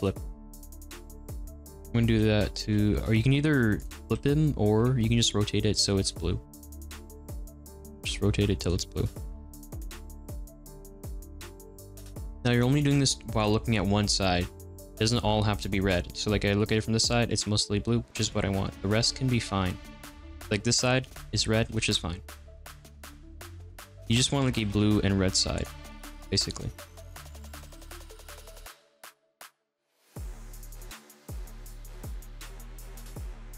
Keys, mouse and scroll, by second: 0.0 alt+n, 0.6 click, 2.1 l, 2.6-3.9 right drag, 2.6 r, 3.9 ctrl+z, 4.7 r, 5.1 right click, 6.1 click, 7.2 l, 8.0 r, 8.7 ctrl+z, 9.7 alt+n, 10.2 click, 12.7 l, 14.2 l, 14.7 r, 15.9 click, 16.1-21.6 middle drag, 21.6 l, 23.1 r, 24.3 ctrl+z, 24.6 r, 25.8 middle click, 26.5 click, 26.9-32.7 typing, 27.0 middle click, 27.3 click, 27.3 middle click, 27.8 middle click, 28.5 click, 28.5 middle click, 28.7 middle click, 28.9 alt+n, 29.0 middle click, 29.1 click, 29.2 middle click, 29.5 click, 29.7 alt+n, 29.8 middle click, 30.2 alt+n, 30.2 middle click, 30.5 click, 30.6 middle click, 31.1 middle click, 31.8 click, 31.9 middle click, 32.8 click, 32.9 middle click.